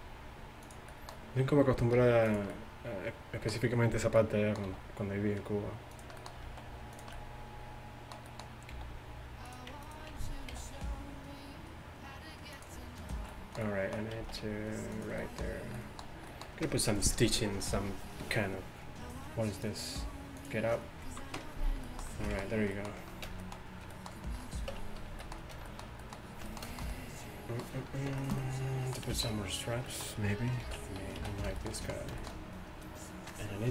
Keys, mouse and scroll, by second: 2.0 r, 4.7 e, 6.5 alt+s, 8.8 g, 10.6 g, 14.3 s, 24.8 Tab, 25.1 a, 25.6 a, 30.7 alt+h, 31.2 a.